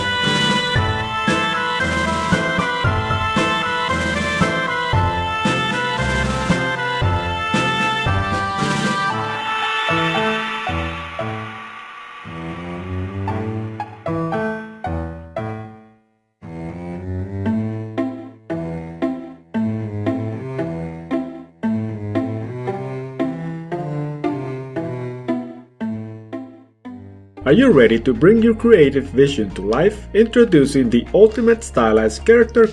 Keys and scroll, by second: 13.0 ctrl+z, 15.8 ctrl+z.